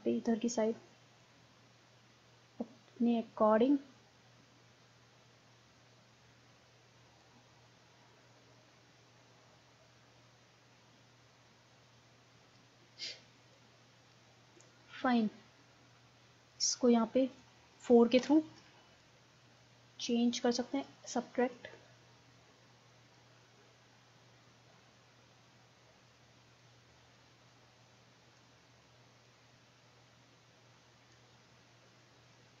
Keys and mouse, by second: 0.5 middle click, 1.2-3.0 drag, 4.0 middle click, 6.1 middle click, 7.2-8.8 drag, 13.6-14.9 drag, 14.9 middle click, 16.6-18.2 drag, 18.2 4, 18.5 middle click, 20.1-23.4 drag, 23.4 middle click, 24.3-25.8 drag, 27.5-30.9 drag, 31.4-32.6 middle drag.